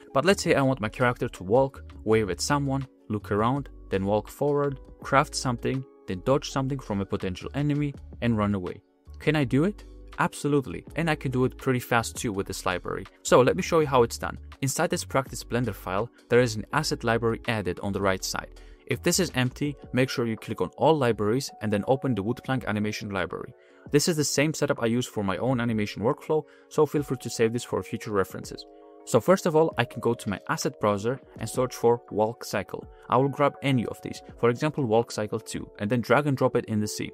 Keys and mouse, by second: 6.9 click, 8.0-8.6 drag, 8.8-9.7 drag, 10.9 click, 11.9 click, 14.5 click, 17.1-18.9 drag, 19.5-21.5 drag, 23.2 click, 28.6-29.9 middle drag, 29.9 click, 30.6-33.0 drag, 35.3 click.